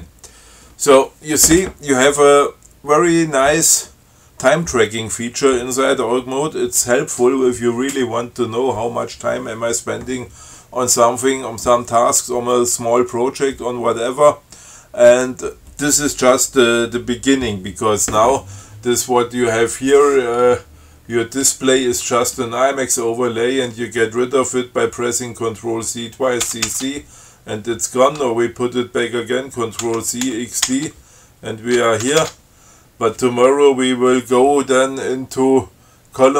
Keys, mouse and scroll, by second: 19.7 scroll up 2, 26.7 ctrl+c, 30.1 ctrl+c, 30.5 ctrl+x, 30.9 ctrl+d, 32.3 ctrl+c.